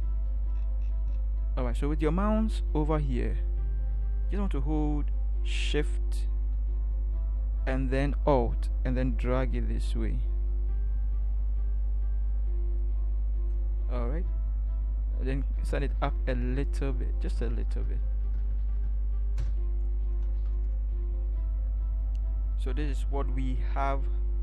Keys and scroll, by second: 15.5 Up, 15.7 Up, 15.9 Up, 16.4 Up, 17.2 Up, 17.7 Up, 18.0 Up, 18.3 Up, 18.4 Up, 19.4 Up, 20.3 ctrl+0.